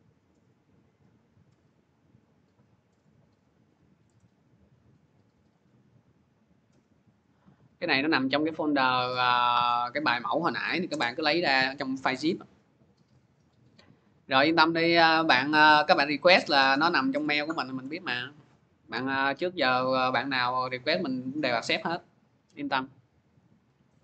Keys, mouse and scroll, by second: 2.6 scroll, 3.5 click, 4.0 right click, 5.3 click, 7.2 click, 8.0 click, 8.9 click, 9.5 click, 10.4 ctrl+v, 10.7 Return, 11.4 click, 17.7 click, 20.1 click, 23.4 click.